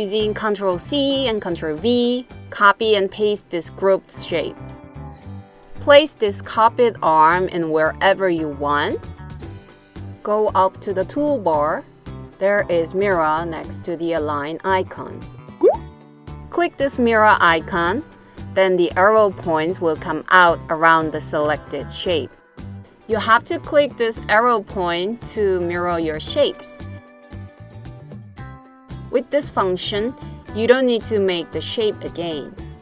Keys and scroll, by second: 0.2 super+c, 1.0 super+v.